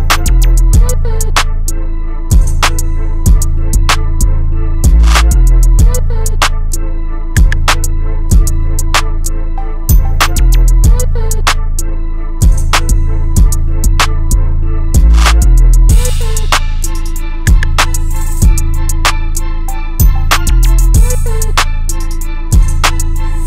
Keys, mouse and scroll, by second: 4.4 click, 8.6 middle click, 9.5 scroll up 1, 11.3 middle click, 12.8 click, 14.1-15.6 scroll up 1, 15.6-20.9 drag, 22.9 middle click.